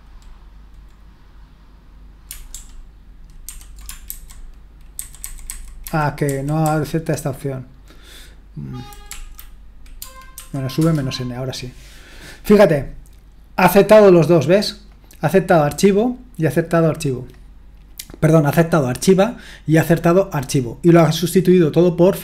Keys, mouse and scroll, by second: 2.5 ctrl+p, 3.4 ctrl+n, 4.1 alt+b, 5.0 alt+b, 5.2 alt+b, 5.5 alt+b, 5.8 alt+b, 6.3 alt+b, 6.6 alt+b, 9.1 Right, 10.0 space, 10.3 -, 10.8 Return, 14.9-17.8 drag, 18.8-20.9 drag, 21.7-22.2 drag.